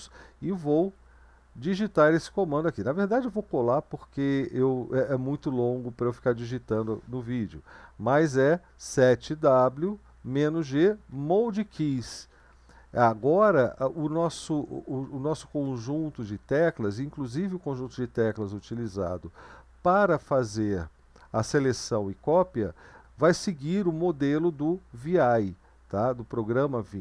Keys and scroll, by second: 0.7 ctrl+v, 7.0 Left, 7.7-8.4 Left, 8.8-9.8 Right, 10.1 Left, 10.1-11.0 typing, 10.5 Right, 11.2 Right, 11.5 Right, 11.7 Right, 11.9 Right, 12.1 Right, 12.3 Right, 12.5 Right, 12.9 Right, 13.2 Left, 13.6 Right, 13.8 Left, 14.2 Right, 14.5 Left, 15.0 Right, 15.4 Left, 15.6 Right, 16.0 Left, 16.4 Right.